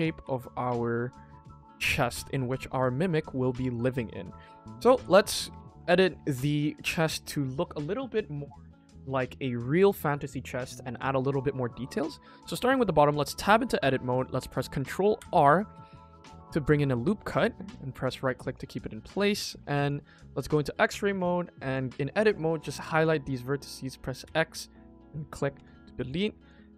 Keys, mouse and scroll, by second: 0.1 s, 1.3 click, 1.5 click, 1.9-2.2 middle drag, 2.7-3.2 scroll down 2, 3.2 middle drag, 3.6 click, 3.9 scroll up 2, 4.1 middle drag, 4.2 KP_1, 4.5 shift+middle click, 4.9 ctrl+s, 5.0 click, 5.4 Tab, 5.7 click, 5.9 scroll up 1, 6.0 middle click, 6.5-6.8 scroll down 2, 6.8 Tab, 7.2 middle click, 7.8 click, 8.5 click, 10.4 shift+middle click, 10.4 scroll up 1, 10.9 middle click, 11.7 shift+middle drag, 12.1 shift+middle drag, 12.5 shift+middle click, 13.0 Tab, 13.5 middle click, 15.1 ctrl+r, 18.1 click, 18.4 Tab, 18.9 KP_1, 19.4 Tab, 19.7 click, 20.4 click, 21.6 click, 22.5 click, 24.2 x, 26.3-26.7 drag.